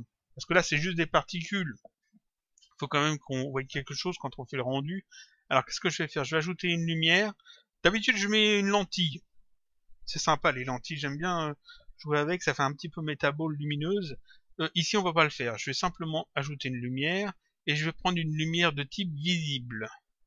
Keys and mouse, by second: 3.8 click, 6.7 click, 14.4 click, 15.8 click, 17.3 click, 19.0 click.